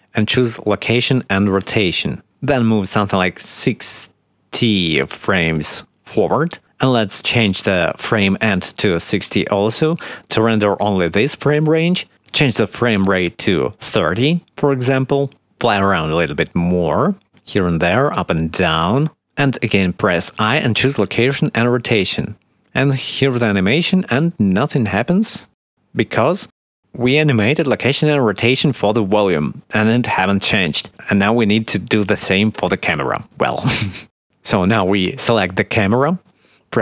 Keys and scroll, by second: 10.1 6, 10.2 0, 10.4 Return, 14.6 shift+`, 14.9 shift+a, 16.2-18.3 typing, 19.5 i.